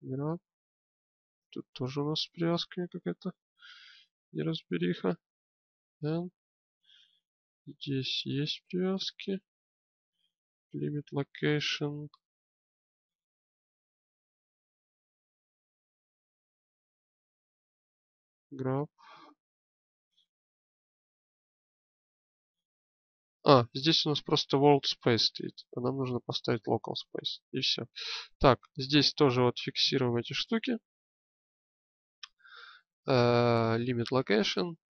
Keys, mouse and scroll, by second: 0.0 g, 3.1 n, 5.5 n, 6.9 n, 7.9 n, 19.3 g, 24.3-26.1 drag, 27.1-28.9 drag.